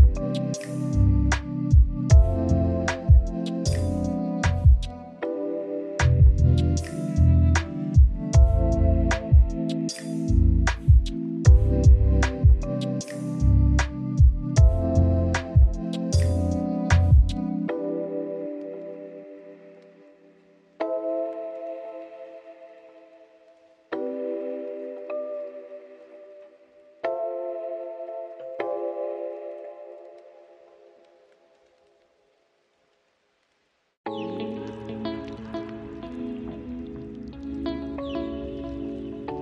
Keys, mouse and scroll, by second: 0.4 click, 0.8 middle click, 0.9 scroll up 1, 0.9 scroll down 5, 1.0-1.3 middle drag, 1.3 click, 2.5 click, 2.8 click, 3.3 s, 3.7 middle click, 4.0 scroll down 4, 4.4 click, 4.9 x, 5.1 middle click, 5.2 click, 5.8 click, 6.1 click, 6.5 click, 7.0 shift+a, 8.0-8.6 scroll up 9, 8.6-9.5 drag, 9.5-10.4 middle drag, 10.5 click, 11.1-12.1 middle drag, 12.1 click, 12.7-13.6 middle drag, 13.8 click, 14.5 middle click, 15.3 click, 16.4-17.1 drag, 17.1-18.4 middle drag, 18.4 scroll down 1, 18.5 middle click, 19.0 shift+d, 19.3 click, 20.1 click, 20.2 click, 20.4 click, 21.7 x, 21.8 click, 21.9 x, 22.0 shift+a, 23.4-24.0 drag, 24.0 middle click, 24.4 scroll up 1, 24.6-25.2 drag, 25.2 middle click, 26.0-28.5 drag, 29.0 middle click, 29.4 click, 30.3 middle click, 30.4 scroll down 1, 30.5-31.6 middle drag, 31.7-33.9 drag, 34.0-34.9 scroll down 14, 34.9-35.3 middle drag, 35.3 click, 35.4 click, 35.6 click, 35.9 click, 36.4 click, 36.6 click, 36.7 middle click, 36.9 drag, 37.0 click, 37.1 scroll down 5, 37.2 click, 37.4 click, 37.9 click, 38.3 middle click, 38.4 `, 38.9 s, 39.3-39.4 middle drag.